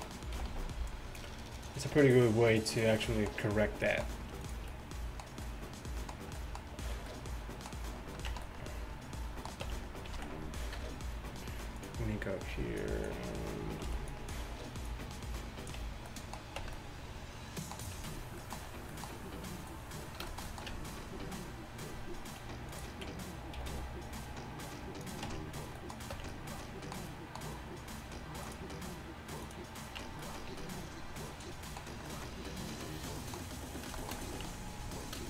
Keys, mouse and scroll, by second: 0.4 g, 4.5-6.0 middle drag, 6.3 middle click, 8.3 Tab, 9.7 Tab, 10.2 z, 10.8 KP_3, 12.6 b, 13.9 b, 16.6 Tab, 16.6 z, 18.0 a, 19.7-20.6 drag, 20.7 Tab, 23.6 g, 25.3 Tab, 26.2 Tab, 28.5-30.0 drag, 30.0 Tab, 34.5 Tab.